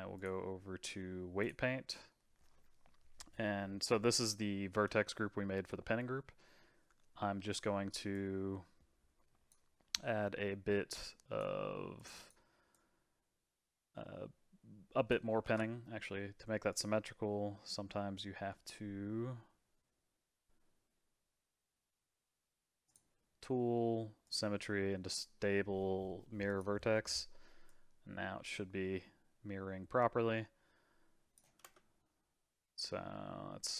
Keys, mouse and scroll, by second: 0.1-2.5 drag, 2.5-7.1 middle drag, 7.1 scroll up 2, 8.1-15.5 drag, 15.5 ctrl+z, 16.7 click, 22.8 click, 24.2-26.6 drag, 27.7-30.7 drag, 31.6 space.